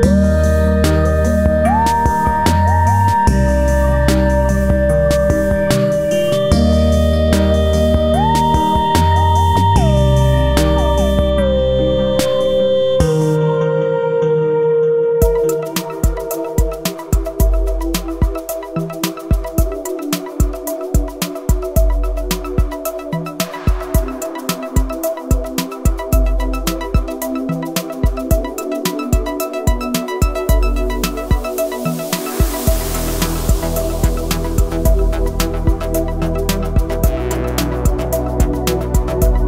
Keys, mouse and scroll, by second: 0.0 Up, 1.2 click, 2.3 click, 3.0 ctrl+g, 3.3 click, 4.2 click, 5.8 F4, 7.3-9.5 drag, 9.6-10.8 scroll down 1, 11.6-14.5 drag, 16.5 Up, 16.9 click, 17.4 Up, 18.1 click, 22.0 click, 23.1-23.9 typing, 24.9 typing, 26.4 typing, 27.2-29.7 drag, 30.9-33.3 drag, 34.2-38.3 drag.